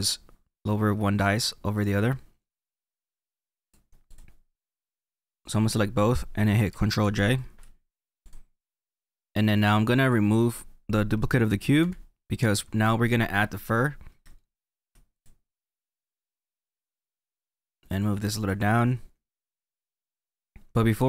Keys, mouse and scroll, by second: 1.7-4.3 drag, 4.3 scroll down 1, 4.4 middle click, 5.3-7.0 drag, 8.2-9.3 drag, 9.3 middle click, 10.0-11.5 drag, 11.8 Delete, 14.3 shift+middle click, 15.1 click, 16.8 click, 18.5 click, 19.4 middle click.